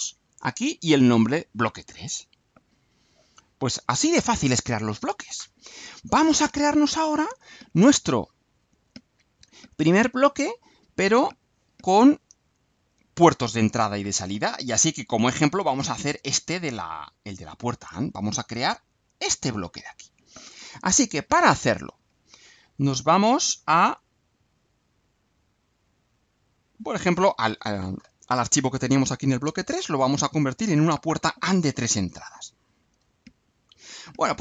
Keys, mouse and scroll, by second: 2.6 click, 3.5 click, 8.6 click, 15.6 click, 17.1 click, 23.7 click, 26.5 click, 32.0-33.2 drag, 33.8 Delete.